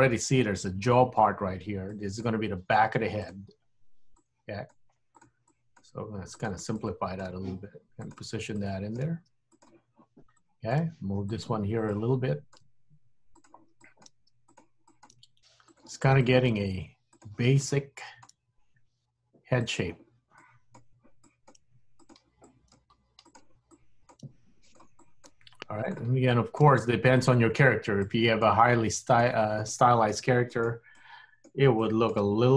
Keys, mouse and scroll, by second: 2.0 click, 2.4 g, 4.2 click, 4.8 g, 5.6 click, 6.0 g, 6.8 click, 7.4 g, 8.7 click, 9.2 g, 10.4 click, 11.0 g, 12.0 click, 12.6 g, 13.9 click, 14.2 g, 14.9 click, 15.2 g, 16.4 click, 16.6 g, 17.8 click, 18.5 g, 20.5 click, 21.3 click, 21.8 g, 22.6 click, 22.9 g, 23.9 click, 24.3 g, 25.2 click, 25.4 g, 26.4 click, 26.7 g, 28.1 click, 28.7 g, 29.8 click, 30.3 g, 31.0 click, 32.0 click, 32.4 g.